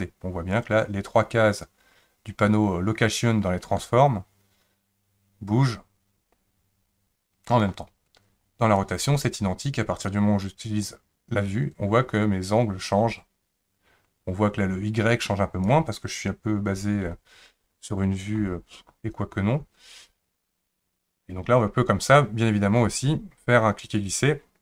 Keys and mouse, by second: 0.6-7.6 drag, 8.8 click, 10.1 click, 10.3-15.7 drag, 23.9-24.6 drag.